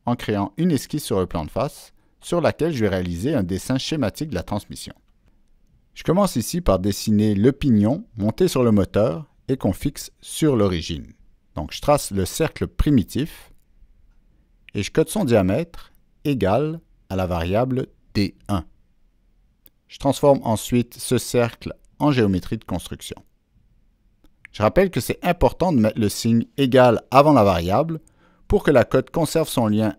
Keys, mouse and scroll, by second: 1.1 click, 1.7 click, 2.4 click, 3.1 click, 3.8 click, 5.1 ctrl+middle click, 5.1 click, 5.4 click, 6.2 right click, 8.5 click, 9.2 click, 9.8 right click, 11.0 click, 11.8 click, 11.8 right click, 12.9 click, 13.0 right click, 17.6 click, 18.5 click, 20.8 click, 21.7 Escape, 22.2 click, 22.3 Escape, 23.4 click, 23.5 Escape, 26.2 ctrl+middle click, 26.2 ctrl+scroll down 2, 26.5 click, 26.8 ctrl+middle click, 26.8 ctrl+scroll up 2, 28.0-29.2 ctrl+middle drag.